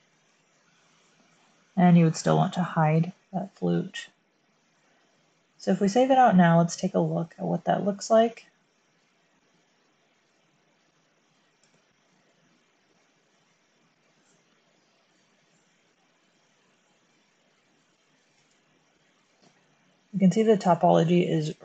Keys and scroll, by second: 3.7 typing, 18.3 space.